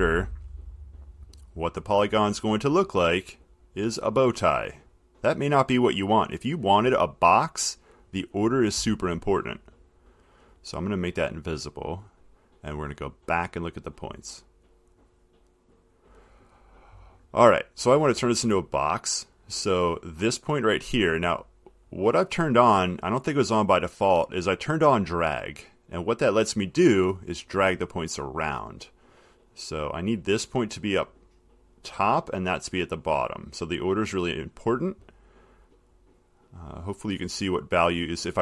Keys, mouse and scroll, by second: 1.9 click, 3.2 click, 4.3 click, 9.2 click, 10.7 click, 11.6 click, 13.3 click, 16.3 click, 23.0 click, 28.8 click, 31.2 click, 33.4 click, 34.7 click, 36.2 click, 36.9 click.